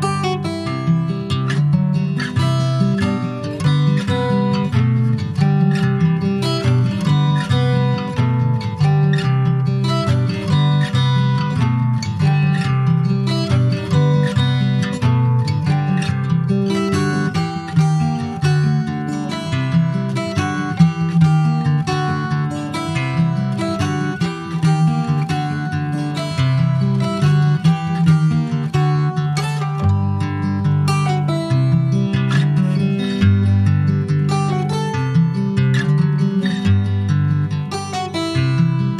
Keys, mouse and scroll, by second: 0.0 click, 1.0-1.7 scroll down 12, 1.7 alt+middle click, 2.7 alt+middle click, 3.5 alt+middle click, 4.2-5.5 shift+middle drag, 5.5 click, 7.0 alt+middle click, 7.7 shift+middle click, 7.9-8.4 shift+scroll up 1, 8.4 r, 11.0 scroll up 1, 11.5 alt+middle click, 11.8 alt+middle click, 12.6 alt+middle click, 13.2-13.9 scroll up 4, 13.9 shift+middle click, 15.4 alt+middle click, 16.3-16.6 scroll up 2, 16.6-17.7 shift+middle drag, 17.7 click, 19.0-20.3 middle drag, 20.3 alt+z, 20.7-21.7 shift+middle drag, 21.7 click, 22.9 alt+middle click, 23.5 scroll down 1, 24.0 middle click, 24.2-24.6 scroll up 2, 24.6-26.1 shift+middle drag, 26.1 r, 30.6 alt+middle click, 31.9 ctrl+z, 32.6 alt+middle click, 33.8 r, 37.5 middle click, 38.1 ctrl+s, 38.3 scroll up 3, 38.6-38.9 middle drag.